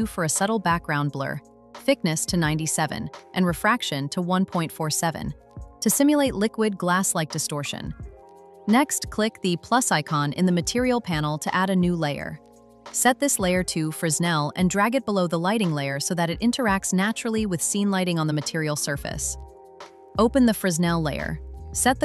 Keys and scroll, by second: 4.7 Return.